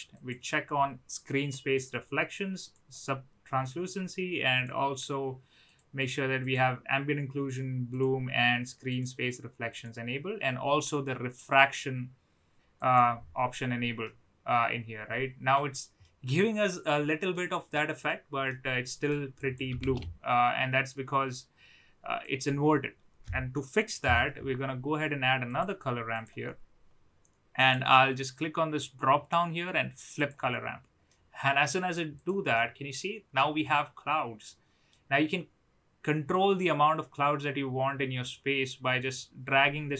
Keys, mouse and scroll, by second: 0.1 click, 2.6 click, 4.5 drag, 5.6 drag, 5.9 click, 6.4 click, 7.9 click, 8.8 click, 9.7 click, 12.7 click, 14.0-15.5 middle drag, 16.0-17.3 middle drag, 17.6-18.1 middle drag, 18.6 middle click, 19.3 click, 20.0 shift+a, 27.5-30.3 drag, 31.1-31.9 middle drag, 32.5-33.3 middle drag, 34.4-34.9 middle drag, 36.3-39.9 drag.